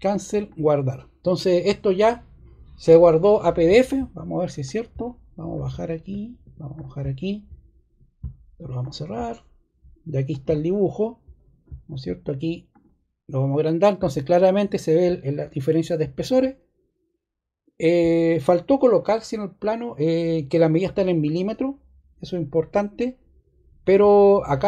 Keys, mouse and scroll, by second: 8.7 click, 10.2 click.